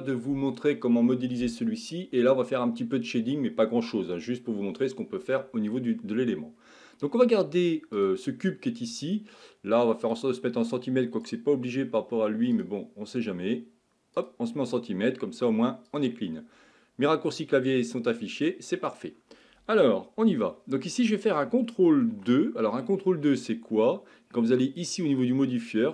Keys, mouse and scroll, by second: 6.3-7.0 scroll up 2, 7.0-7.3 scroll down 2, 8.0 click, 10.0 click, 11.2-15.6 drag, 15.9-18.4 drag, 18.4 scroll up 2, 22.1 ctrl+2, 24.6 click.